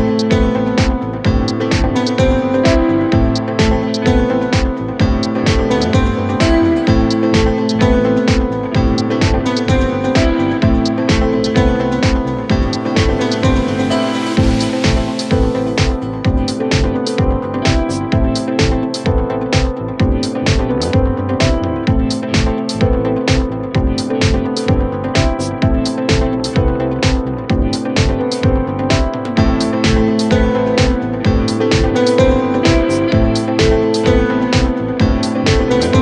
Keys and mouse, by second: 1.9 r, 3.9 r, 7.1 KP_1, 7.1 KP_3, 9.5 a, 9.6 a, 10.2 b, 12.8 b, 15.3 r, 17.8 g, 24.9-28.0 drag, 25.7 BackSpace, 27.2 z, 28.0-36.0 middle drag, 29.1 KP_1, 29.1 KP_3, 30.6 g, 31.5 g, 35.4-36.0 typing.